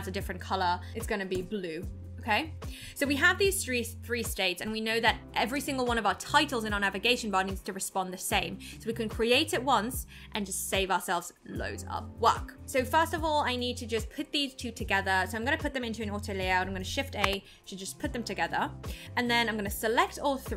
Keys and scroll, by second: 17.2 shift+a.